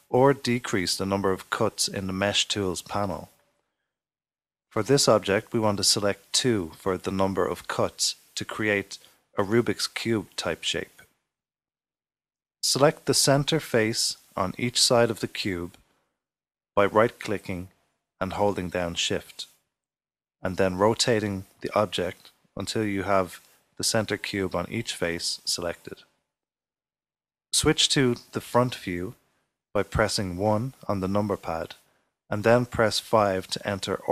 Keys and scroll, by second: 28.4 typing, 33.0 typing.